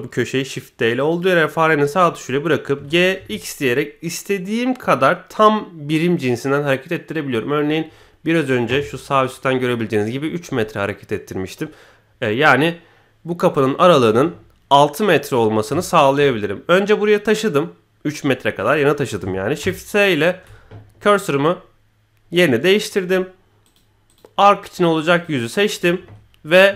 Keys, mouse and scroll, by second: 2.7 g, 15.8 shift+middle click, 19.5 shift+s, 23.6 click, 24.0 click, 24.4 middle click, 25.1 click, 25.7 KP_1.